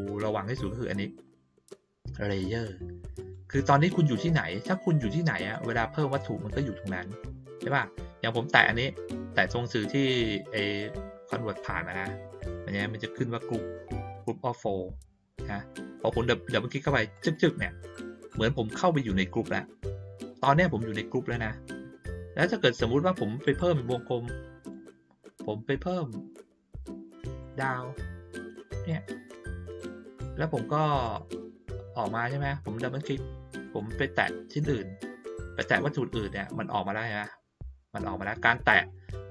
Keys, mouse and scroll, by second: 7.6 click, 17.1 click, 17.3 click, 23.4 click, 24.3 click, 27.4 click, 28.4 click, 31.0 click, 33.6 click, 34.6 click, 35.8 click.